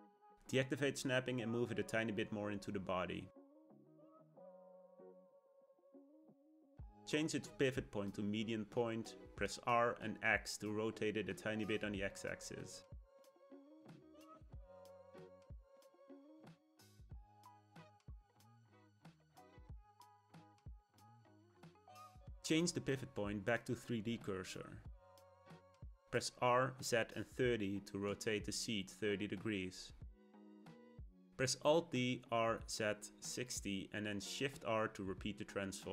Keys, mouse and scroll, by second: 2.8 g, 5.0 middle click, 5.5 r, 7.2 ., 9.0 r, 12.7 click, 13.0-15.1 middle drag, 15.1 click, 15.6 r, 17.1 g, 18.0 click, 18.4-20.3 middle drag, 20.3 click, 20.7 shift+middle click, 21.7 ., 25.4 r, 28.5-31.6 middle drag, 31.8 alt+d, 34.5 shift+r, 34.7 shift+r, 35.0 shift+r, 35.3 shift+r, 35.8 click.